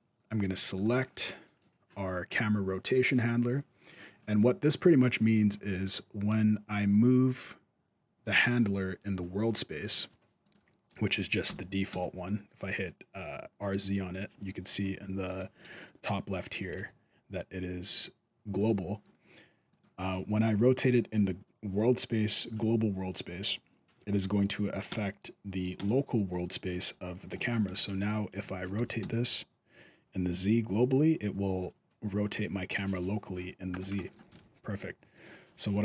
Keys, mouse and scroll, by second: 0.5 click, 10.2 right click, 11.3 r, 16.5 r, 19.5 right click, 19.8 right click, 24.7 click, 26.7-27.1 scroll down 2, 27.1 shift+middle click, 27.5 alt+a, 28.2 right click, 28.2 shift+middle click, 28.5 r, 33.8 shift+middle click, 34.1 alt+a, 34.9 right click.